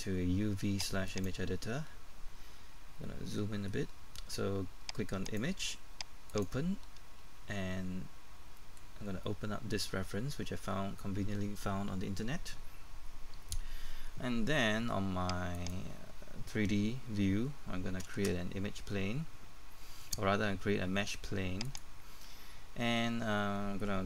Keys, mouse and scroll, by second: 2.0-2.4 scroll up 1, 3.3 middle click, 5.3-7.4 drag, 8.6 middle click, 9.1-15.4 scroll down 1, 15.5 right click, 18.6 space, 21.6 click, 22.5-24.0 scroll up 1.